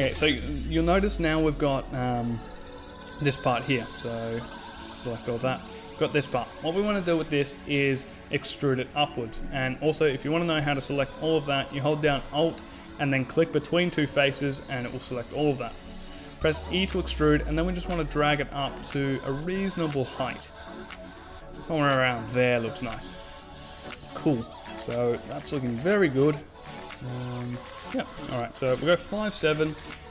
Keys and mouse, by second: 3.4 right click, 4.1 middle click, 4.1 right click, 5.0-6.0 middle drag, 9.5 a, 10.1 middle click, 10.9-12.3 middle drag, 12.7-14.5 right drag, 14.6 e, 16.0 click, 18.6-20.3 middle drag, 20.2 a, 20.5 Tab, 27.7 KP_5, 27.9 KP_7.